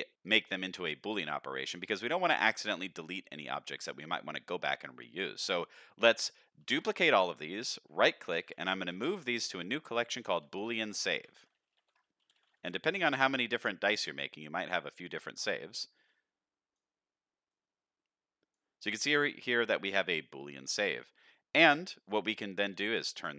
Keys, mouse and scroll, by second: 0.1 middle click, 0.5 shift+middle click, 1.2-1.7 middle drag, 1.8 middle drag, 2.5-2.9 middle drag, 3.6-4.1 middle drag, 4.8 middle drag, 6.6 shift+d, 8.4 m, 10.7 o, 16.1 click, 17.5-18.5 drag, 19.1 click.